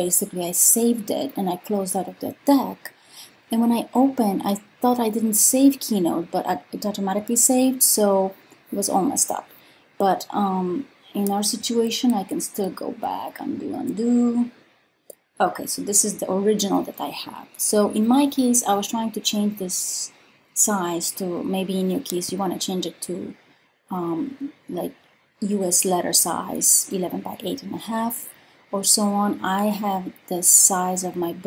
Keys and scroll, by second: 11.8 super+z, 12.4 super+z, 12.8 super+z, 13.5 super+z.